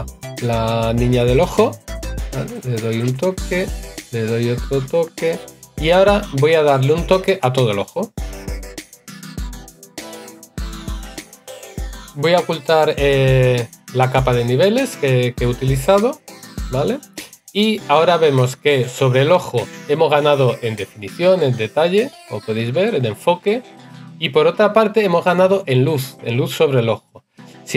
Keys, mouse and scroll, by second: 6.8 right click.